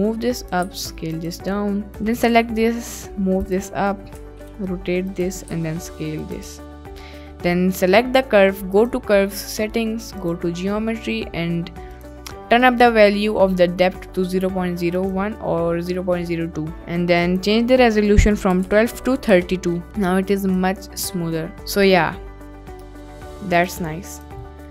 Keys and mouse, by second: 0.5 click, 0.7 s, 1.2 click, 1.9 click, 2.3 g, 3.4 click, 4.1 r, 5.1 click, 5.4 s, 6.4 Tab, 10.1 click, 12.0 click, 15.0 click, 17.2-19.4 drag, 19.8 ctrl+s, 21.2-21.5 middle drag, 21.8 click, 22.3-22.8 middle drag, 23.0 click, 24.5 middle drag.